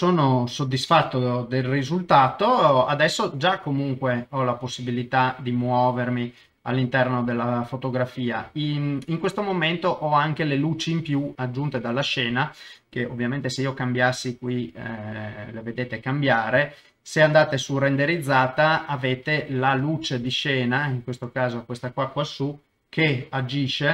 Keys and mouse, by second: 2.4-5.6 middle drag, 5.7 ctrl+middle click, 6.5 shift+middle click, 6.9-8.1 middle drag, 8.5 shift+middle click, 9.0 middle click, 11.3 middle click, 12.2-16.3 drag, 17.4 click, 19.9 ctrl+middle click, 20.3 shift+middle click, 21.4 middle click, 22.7 g.